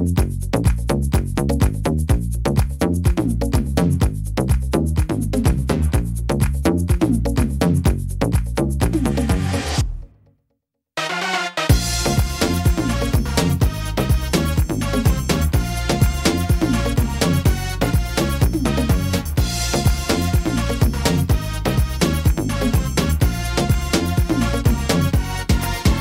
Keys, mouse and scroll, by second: 0.9 middle click, 1.8 scroll up 2, 2.5 right click, 4.1 click, 4.9 right click, 5.8 click, 7.7 middle click, 8.3 right click, 8.8 shift+right click, 9.4 click, 10.8 middle click, 11.5 right click, 12.1 shift+right click, 12.8 right click, 13.5 click, 14.6 middle click, 15.4 shift+middle click, 16.2 right click, 16.8 shift+right click, 17.4 shift+right click, 18.2 click, 19.0 middle click, 20.0 right click, 20.6 shift+right click, 21.1 right click, 22.0 click, 23.2 right click, 23.7 middle click, 24.4 right click, 24.9 shift+right click, 25.3 right click, 25.7 middle click.